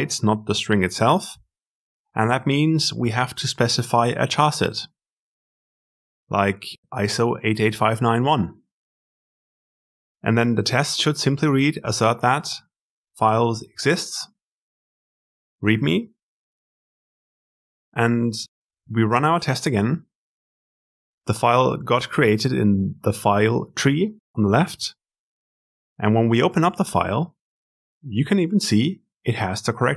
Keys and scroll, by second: 0.3 shift+F6, 19.5 ctrl+alt+F10.